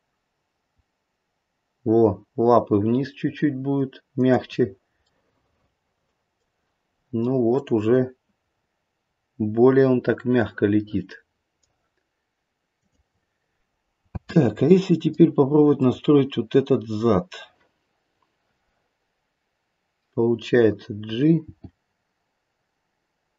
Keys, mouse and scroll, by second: 5.0 middle click, 7.6 click, 8.7-9.4 scroll down 1, 10.3 middle click, 12.8 click, 14.1 space, 14.6 middle click, 15.7 click, 21.4 g.